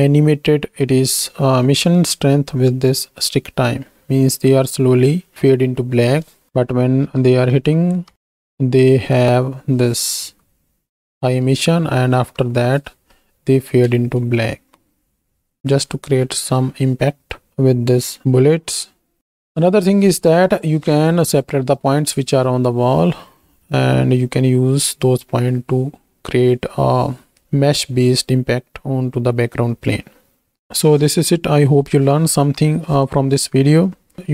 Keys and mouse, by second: 1.7 click, 6.5 shift+Right, 6.5 shift+Left, 7.3 Right, 7.7 Right, 8.1 Right, 8.1 space, 9.1 space, 10.4 Left, 11.0 Left, 11.5 Right, 11.9 Right, 12.2 Right, 12.5 Right, 14.1 space.